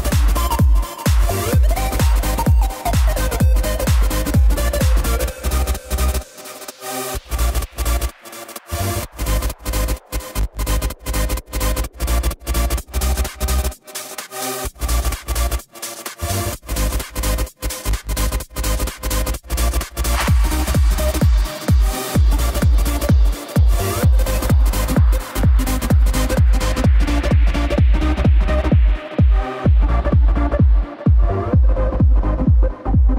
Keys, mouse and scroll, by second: 1.0 space, 2.8 space, 4.1-9.0 drag, 10.5 a, 11.2 a, 11.7 click, 12.3 a, 13.1 s, 21.9 click, 32.2 click.